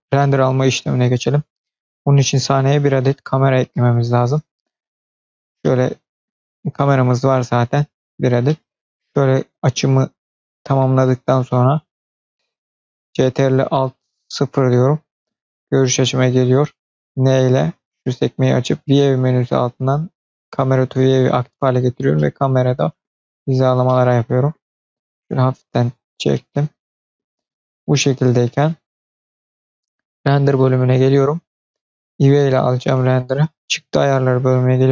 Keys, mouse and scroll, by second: 4.0 drag, 5.2-5.5 scroll down 2, 5.5 middle click, 7.0 click, 7.9-8.2 scroll up 2, 8.3-9.2 middle drag, 9.6-10.7 shift+middle drag, 14.2 ctrl+alt+KP_0, 17.0 n, 18.3 click, 18.8 click, 19.1 click, 20.2 click, 21.2-21.9 scroll down 1, 22.0 shift+middle click, 23.8 shift+middle click, 24.8-25.5 scroll down 1, 25.7-26.2 shift+scroll up 1, 26.2 shift+middle click, 30.0 click, 33.4-34.0 scroll down 2, 34.0 click, 34.7-34.9 drag.